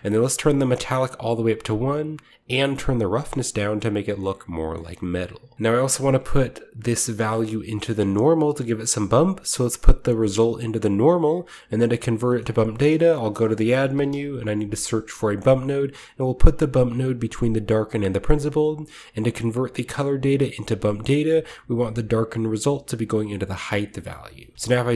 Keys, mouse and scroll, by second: 0.2-1.4 drag, 0.2-1.4 scroll up 1, 2.3-3.3 drag, 3.6-4.1 scroll down 2, 4.1-4.7 shift+middle drag, 4.7 shift+scroll up 2, 4.9 middle click, 5.4 scroll down 1, 7.1 click, 8.7-9.6 scroll up 2, 9.6-10.9 scroll up 1, 9.7-10.9 drag, 12.5 typing, 12.6-14.5 shift+middle drag, 13.0-14.7 shift+drag, 13.7-14.0 typing, 15.3-17.4 drag, 15.3-16.8 middle drag, 17.5 click, 17.8 click, 21.2-23.5 drag, 23.9 middle click, 24.6-24.9 scroll up 3.